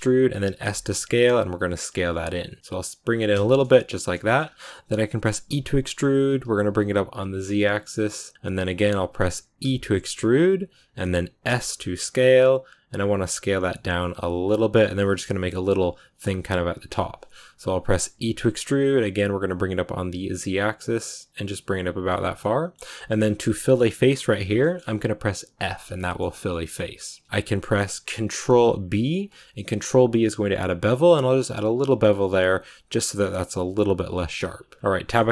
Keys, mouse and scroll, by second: 3.3 shift+middle click, 4.1-5.3 shift+scroll up 4, 4.1 shift+middle click, 5.3 e, 21.9-22.3 scroll down 2, 22.3 middle click, 23.0 scroll up 6, 24.2-28.7 shift+middle drag, 34.0-34.5 scroll down 5, 34.1 Tab, 34.9 scroll up 1, 35.1-35.3 shift+middle drag.